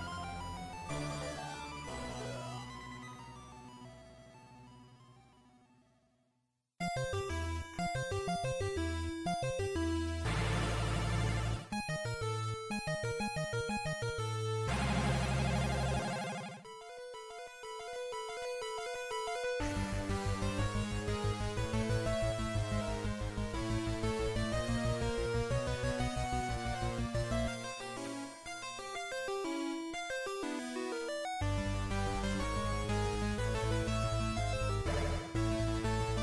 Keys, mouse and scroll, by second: 0.1 Left, 0.1 Right, 25.9 ctrl+Up, 30.4 Tab, 32.2 a, 34.8 l.